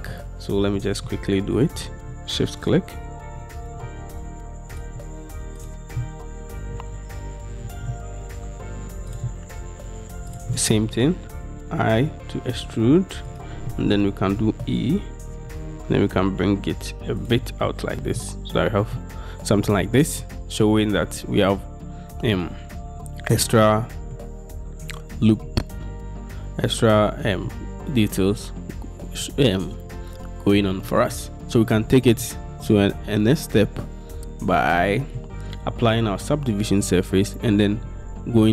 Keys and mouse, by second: 0.4 Tab, 15.4 e, 17.9 Tab, 18.3-20.8 drag.